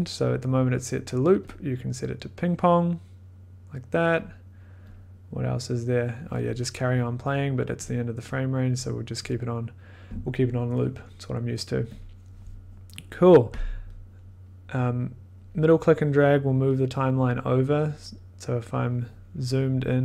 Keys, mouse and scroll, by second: 1.4 click, 4.1 click, 4.2 click, 4.9 click, 7.8 click, 9.2 click, 9.2 click, 9.3 click, 11.9 click, 15.1 scroll, 17.4 middle click, 18.5 click.